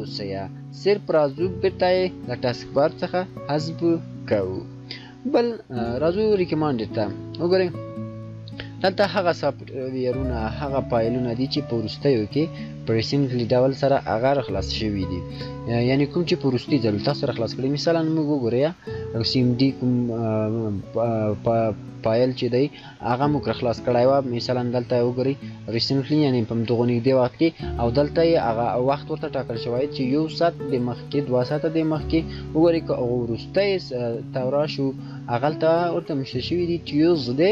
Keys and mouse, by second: 1.7 shift+click, 7.4 shift+click, 15.1 shift+click, 31.6 shift+click.